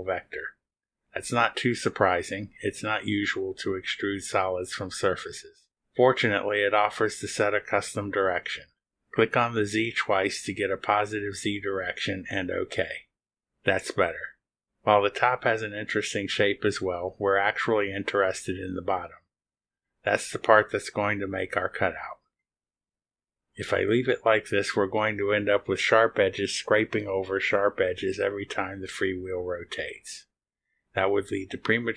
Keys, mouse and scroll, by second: 0.6 click, 9.4 click, 9.8 click, 13.0 click, 17.4 scroll up 1, 17.6 click, 17.7 right click, 22.3 click, 22.7 space, 26.6-28.3 right drag, 29.0-29.9 typing, 30.6 middle click, 31.5 scroll down 2.